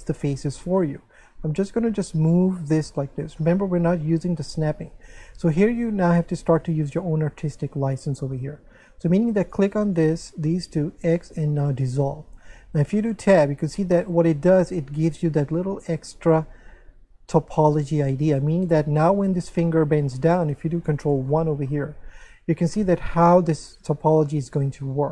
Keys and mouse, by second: 3.1 click, 9.4 right click, 10.0 shift+right click, 11.0 x, 11.7 click, 13.0 middle click, 13.3 Tab, 13.9 shift+middle click, 19.2 Tab, 21.3 shift+middle click.